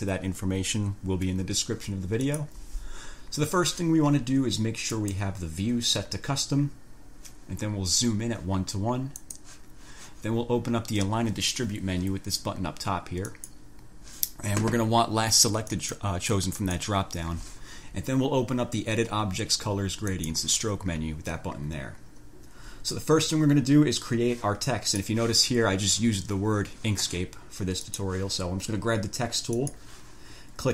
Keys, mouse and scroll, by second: 2.4 click, 5.1 click, 9.4 click, 13.4 click, 15.8 click, 16.8 click, 20.2 click, 25.2 click, 28.0 click, 29.8 click.